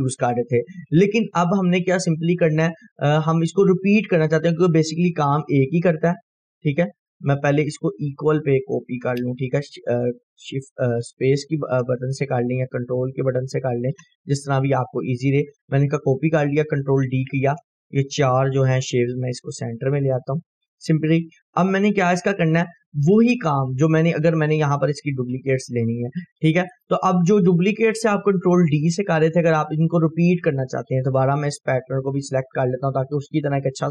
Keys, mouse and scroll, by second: 0.0 ctrl+d, 2.3-3.0 click, 3.1 scroll up 1, 3.7-4.3 click, 5.0 scroll up 1, 6.1 click, 6.6 Delete, 6.8 scroll down 1, 7.4 click, 7.5 Delete, 7.9-15.3 drag, 8.6-15.6 ctrl+click, 15.3 shift+right click, 15.8 scroll down 1, 18.6-19.3 drag, 22.5 scroll up 1, 23.8-27.1 drag, 27.2 scroll down 1, 30.8-31.7 drag, 32.4-32.7 ctrl+click, 33.2-33.5 drag.